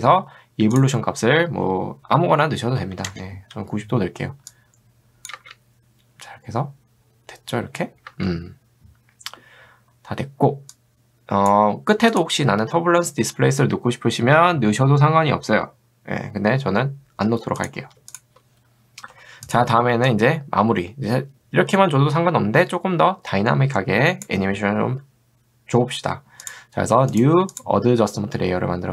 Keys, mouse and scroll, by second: 2.5-3.4 typing, 4.5 click, 5.3 space, 8.3 space, 9.8 middle click, 11.2 click, 12.1 click, 18.1 shift+click, 19.5 click, 20.1-24.3 drag, 27.1 right click, 27.6 click.